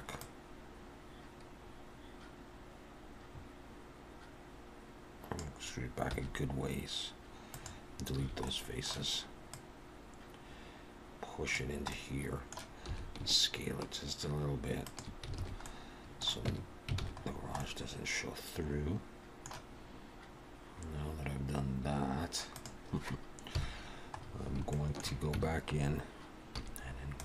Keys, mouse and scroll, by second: 0.2 click, 6.1 x, 8.2 a, 8.5 middle click, 9.5 click, 11.9 middle click, 12.9 s, 15.3 alt+a, 15.6 middle click, 16.5 Tab, 17.0 alt+a, 17.2-18.6 scroll down 3, 17.6 middle click, 19.9-20.2 scroll up 2, 20.4 scroll down 1, 22.5 click, 23.5 KP_1, 24.2 scroll up 2, 24.7 shift+middle click, 25.4 Tab, 26.6 z.